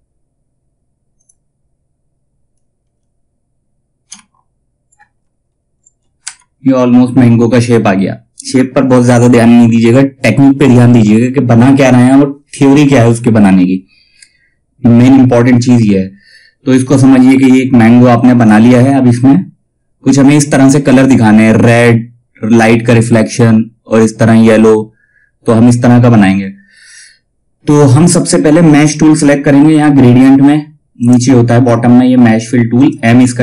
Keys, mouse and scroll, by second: 7.1 space, 17.9 click, 30.5-32.2 drag.